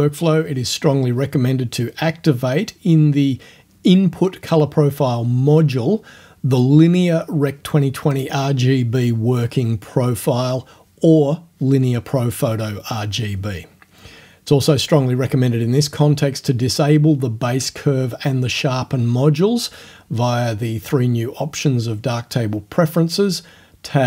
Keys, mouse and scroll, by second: 2.8 click, 6.4 click, 7.8 click, 8.4 click, 9.8 click, 13.2 click, 14.8 click, 16.1 click, 17.3 click, 21.3 click, 22.6 click.